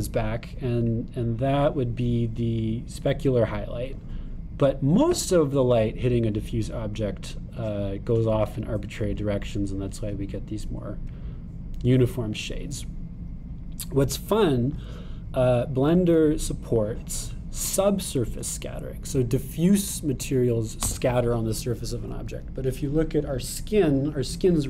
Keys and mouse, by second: 9.8-13.4 middle drag, 13.4-17.5 drag.